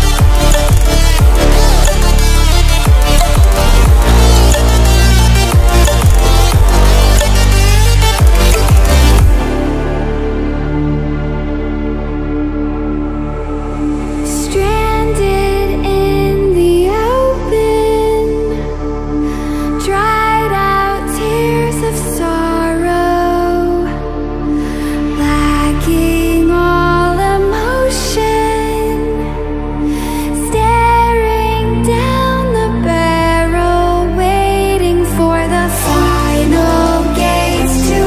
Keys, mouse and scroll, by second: 0.0-0.9 typing, 2.4 click, 5.3-5.9 alt+shift+click, 6.6-7.3 ctrl+scroll down 2, 9.1-13.4 drag, 16.4-16.8 ctrl+alt+scroll up 1, 18.2-19.1 alt+shift+drag, 24.0 ctrl+alt+scroll down 1, 26.0 ctrl+alt+scroll up 1, 28.1 ctrl+alt+scroll up 1, 29.3-32.5 drag, 32.4 shift+click, 33.4-34.0 alt+shift+click, 34.5-35.8 drag, 36.9 ctrl+alt+scroll down 2.